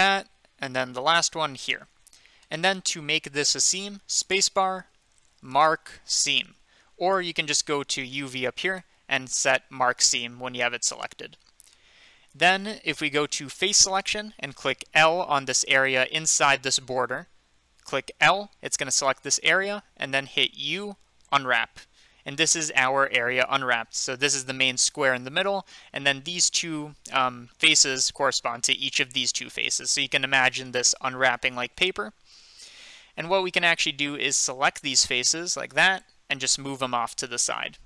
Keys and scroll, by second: 4.8-6.2 typing, 13.9 3, 18.2 l, 20.6 u, 36.9 g.